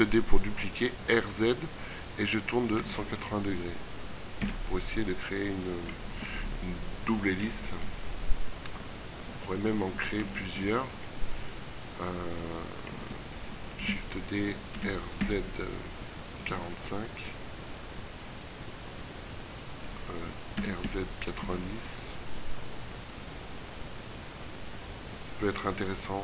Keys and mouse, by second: 10.4 ctrl+z, 10.8 ctrl+z, 12.2 shift+d, 14.8 r, 20.4 r.